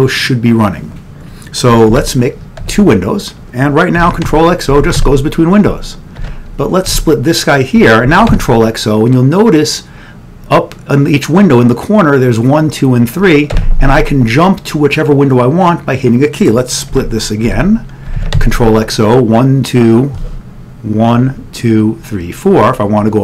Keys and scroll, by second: 2.1 ctrl+x, 2.7 3, 4.0 ctrl+x, 4.9 o, 8.2 ctrl+x, 8.2 o, 13.7 typing, 17.1 ctrl+x, 17.6 3, 18.2 ctrl+x, 21.0 o.